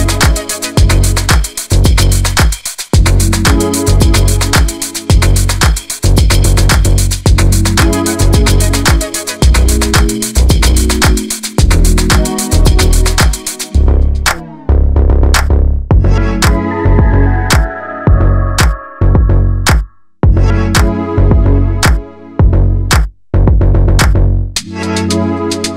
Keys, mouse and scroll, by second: 0.0 click, 0.6-1.7 middle drag, 1.7 KP_Decimal, 2.0-2.7 middle drag, 2.7 g, 3.2-4.1 middle drag, 4.1 click, 4.2-5.1 middle drag, 5.1 KP_7, 5.4 click, 5.5 g, 5.9-6.5 middle drag, 6.5 click, 6.9-7.2 middle drag, 7.2 g, 7.7-8.1 middle drag, 8.1 click, 8.2-9.4 scroll down 3, 9.4-9.7 middle drag, 9.7 KP_7, 10.0 drag, 10.1-10.5 scroll up 5, 10.5-10.9 shift+middle drag, 10.9 scroll down 1, 11.1 shift+middle click, 11.5 shift+d, 13.3 shift+d, 14.3 KP_Decimal, 14.5 scroll down 2, 14.6 middle drag, 14.8 scroll up 1, 15.0 click, 15.4 middle click, 15.6 scroll up 1, 15.8 middle click, 16.1 click, 16.6-17.0 middle drag, 17.0 click, 17.7 click, 17.8-18.3 scroll down 3, 17.9 middle drag, 18.3 middle drag, 18.5 click, 18.6-19.0 scroll up 1, 19.0 shift+middle click, 19.2 scroll up 2, 19.4 click, 20.1-20.8 middle drag, 20.8 click, 21.5 click, 22.3 scroll down 3, 22.4 middle drag, 22.5-22.9 scroll up 5, 22.9-23.3 drag, 24.0 middle click, 24.5-24.9 scroll down 1, 24.9 click, 25.5-25.7 middle drag.